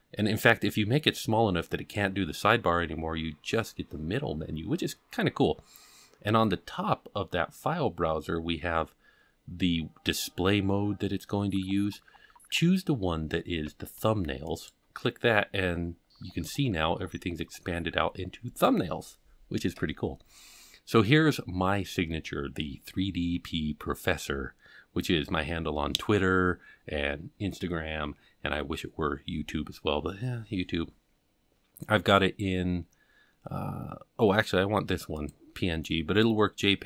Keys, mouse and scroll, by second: 0.0-2.0 drag, 14.5 click, 15.3-18.2 scroll down 20, 18.2-18.8 scroll down 2, 18.8-19.6 scroll down 1, 35.1 click.